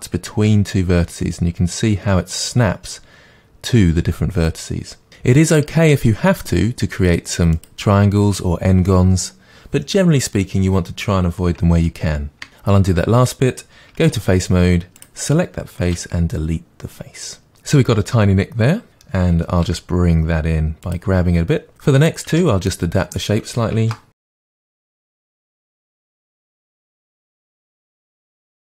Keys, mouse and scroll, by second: 12.5 ctrl+z, 14.0 3, 15.0 click, 15.9 Delete, 17.5-18.0 scroll up 2, 18.9 click, 19.6 g, 20.9 click, 22.3 Tab, 23.8 ctrl+r, 24.5 g, 24.7 click, 24.8 g, 25.0 click, 25.0 g, 25.3 g, 25.5 Tab, 25.9 ctrl+r, 26.2 click, 26.3 g, 26.6 middle click, 26.9 g, 27.4 click, 27.6-28.6 middle drag, 27.6 scroll down 2, 28.0 Tab, 28.3 click, 28.5 g.